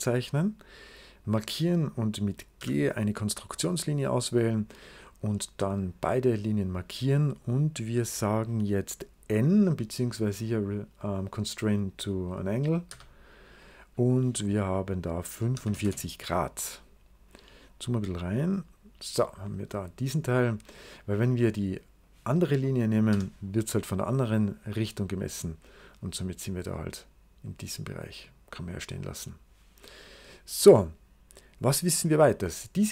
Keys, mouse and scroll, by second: 1.1 click, 2.5 g, 3.4 right click, 5.6 click, 6.4 click, 12.8 n, 15.1-16.0 typing, 17.0-18.2 scroll up 2, 18.2-19.6 drag, 18.2-19.6 scroll up 1, 20.0-20.8 scroll down 2, 20.1 click, 20.8 click, 21.9 click, 23.0 n, 24.4-28.1 drag, 28.8 right click, 29.3-29.7 scroll down 2, 30.6 right click.